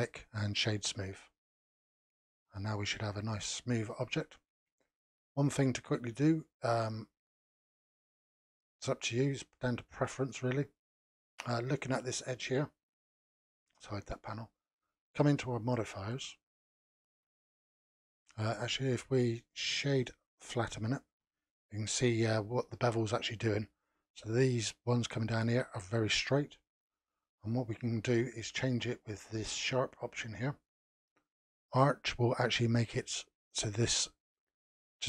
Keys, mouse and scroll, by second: 1.5 scroll up 3, 2.4-5.7 shift+middle drag, 5.7 scroll up 3, 6.3-8.9 shift+middle drag, 8.9-9.3 scroll up 1, 9.3-10.1 shift+middle drag, 10.1-11.0 scroll up 2, 13.6 n, 15.6 click, 16.8-19.3 middle drag, 19.3-22.3 right drag, 29.5-32.5 drag.